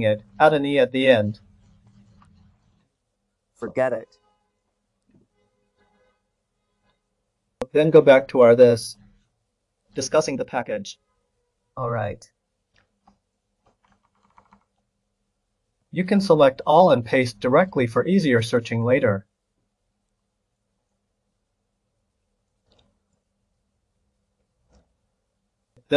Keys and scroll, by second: 13.9 ctrl+c, 16.0 ctrl+a, 16.3 c, 18.6 ctrl+v.